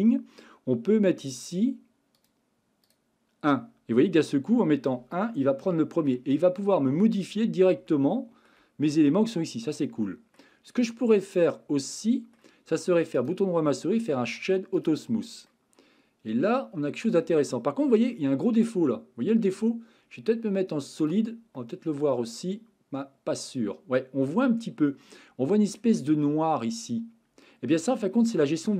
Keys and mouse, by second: 2.2 click, 2.8 click, 4.1-5.2 middle drag, 5.6-6.1 shift+middle drag, 7.9-8.5 shift+middle drag, 10.1 middle drag, 11.5-12.4 middle drag, 13.2-14.9 right drag, 15.5-18.1 middle drag, 21.0 click, 21.6-24.3 middle drag, 24.9 middle click, 25.8 middle click, 27.4-28.7 middle drag.